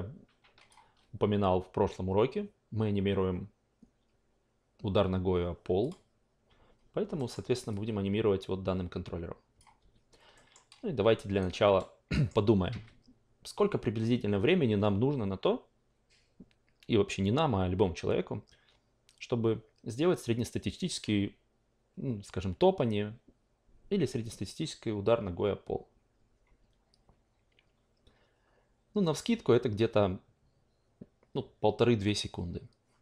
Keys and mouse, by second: 5.8 click, 7.1 alt+middle click, 7.7-9.8 drag, 9.8 ctrl+z, 10.3 alt+middle drag, 11.4-11.7 alt+right drag, 12.1 alt+middle drag.